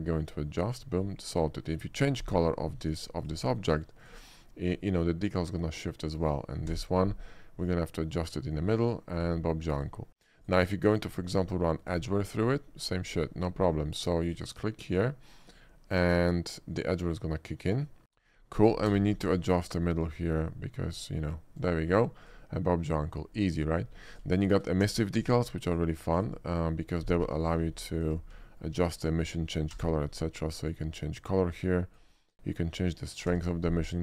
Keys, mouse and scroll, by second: 0.8 click, 1.0 middle click, 1.3 click, 3.2 click, 4.1 click, 6.2 click, 6.8 d, 7.7 click, 8.1 middle click, 9.2 click, 9.8 click, 10.5 click, 11.3 click, 12.2 shift+middle click, 14.3 shift+click, 15.0 shift+click, 18.0 click, 19.0 d, 21.6 click, 21.9 middle click, 22.3 click, 23.9 middle drag, 24.1 click, 24.5 shift+middle drag, 24.9 d, 25.7 click, 26.2 click, 27.3 g, 27.5 ctrl+middle click, 27.9 ctrl+g, 28.0 click, 28.5 shift+middle drag, 29.0 middle click, 29.2 shift+click, 29.7 d, 30.6 click, 31.2 click, 33.5 e, 33.8 d.